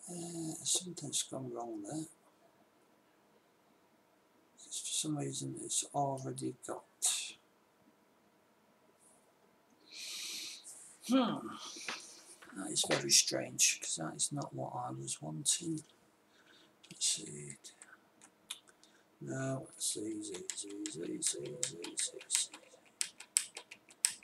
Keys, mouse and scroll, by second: 17.6 ctrl+s, 20.2 ctrl+z, 20.5 ctrl+z, 20.9 ctrl+z, 21.3 ctrl+z, 21.8 ctrl+z, 22.1 ctrl+z, 22.4 ctrl+z, 22.8 ctrl+z, 23.0 ctrl+z, 23.4 ctrl+z, 23.8 ctrl+z, 24.1 ctrl+z.